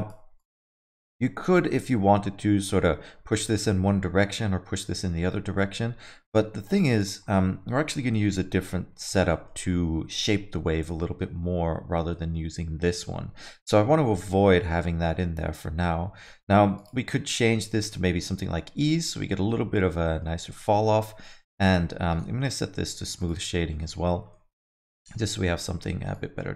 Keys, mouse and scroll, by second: 0.4 click, 1.7 alt+middle click, 2.7 click, 7.0 click, 9.3 alt+middle click, 9.6-10.0 scroll up 3, 10.6 alt+middle click, 11.0 middle click, 12.1 middle click, 12.9 alt+middle click, 16.8 click, 18.8 alt+middle click, 20.0 middle click, 20.7 middle click, 21.6 click, 22.1 right click, 23.5 alt+middle click, 23.8 middle click, 24.0 scroll down 2, 24.3 alt+middle click, 26.1 click.